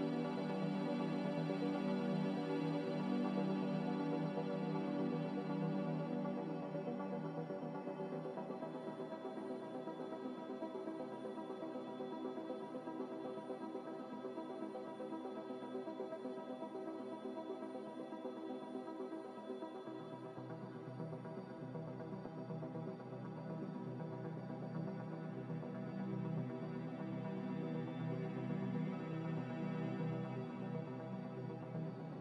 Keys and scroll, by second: 25.0-25.8 typing, 27.7-29.5 typing.